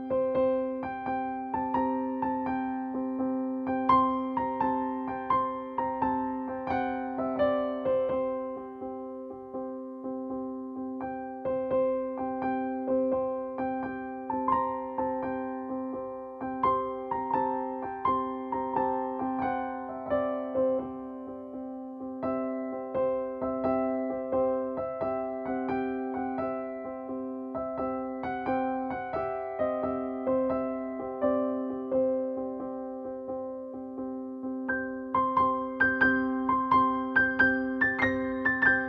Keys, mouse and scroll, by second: 3.5 click, 10.1-13.0 drag, 13.3-14.9 drag, 14.9 ctrl+space, 15.1 ctrl+click, 15.3 ctrl+space, 16.0 click, 16.3 space, 16.5 click, 16.8 space, 17.5 click, 18.1-20.2 shift+drag, 20.2 space, 20.3 click, 20.6 space, 23.1-25.6 drag, 26.3 ctrl+space, 26.3 ctrl+click, 26.7 ctrl+space, 27.2-29.3 drag, 29.3 space, 29.4 click, 34.0 p, 37.5 typing, 37.7 shift+Return.